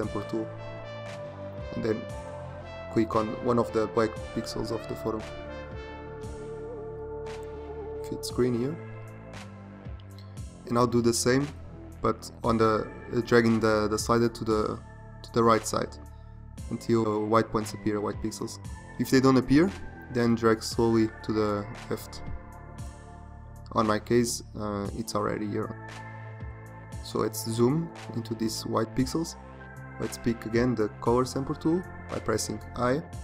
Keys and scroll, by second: 7.1 ctrl+0, 25.8 z, 31.6 |.